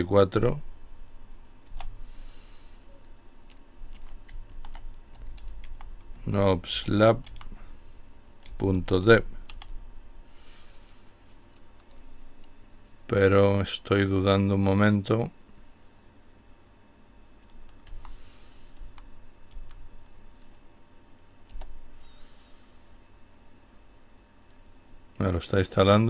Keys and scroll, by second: 0.5-1.2 typing, 3.5-8.6 typing, 17.2 Up, 17.8 Down, 18.7 Down, 20.6 typing.